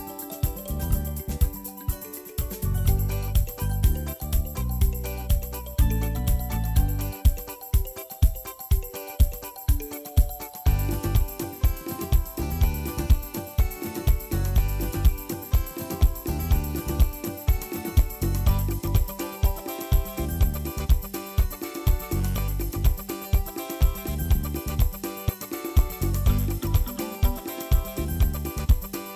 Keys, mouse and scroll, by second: 1.0 click, 2.3 click, 3.9 click, 6.3-8.2 drag, 9.8-11.2 drag, 15.6 click, 17.1-19.9 drag, 17.6 KP_3, 24.1 ctrl+s, 24.4 shift+middle click, 25.0-25.6 scroll up 1, 25.6 KP_Divide, 25.8 KP_1, 26.1 shift+middle click, 26.3 scroll up 2, 27.1 click, 27.8-29.1 drag.